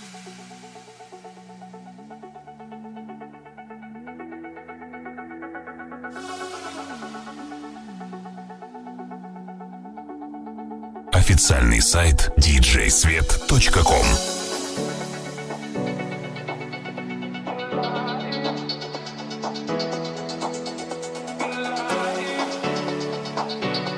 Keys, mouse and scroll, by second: 1.9-7.0 middle drag, 3.0 click, 6.2 Tab, 7.0 alt+right click, 7.1-23.9 alt+middle drag, 7.8 alt+z, 20.6 ctrl+Tab.